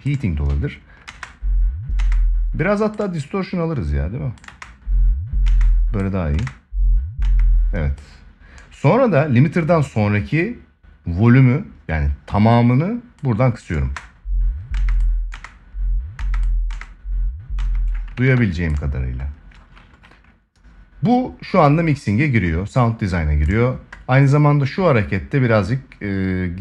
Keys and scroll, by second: 0.8 space, 4.2 space, 13.5 space, 17.8 ctrl+s.